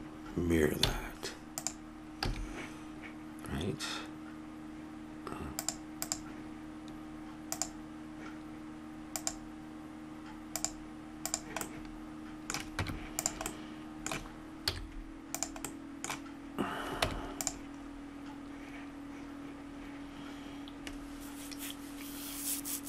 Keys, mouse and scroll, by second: 0.9 x, 2.3 a, 5.5-7.8 drag, 9.1-11.6 drag, 11.6-12.8 middle drag, 12.8 Tab, 13.7-15.3 middle drag, 14.6 z, 15.7 middle click, 17.0 Tab, 18.0 middle click.